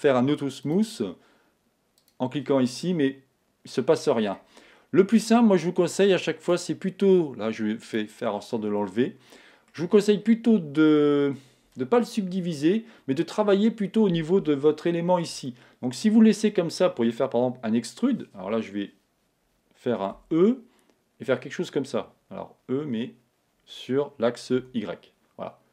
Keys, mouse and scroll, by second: 2.7-4.3 drag, 4.5 Tab, 8.4-10.4 drag, 8.4-12.8 middle drag, 14.9-18.3 middle drag.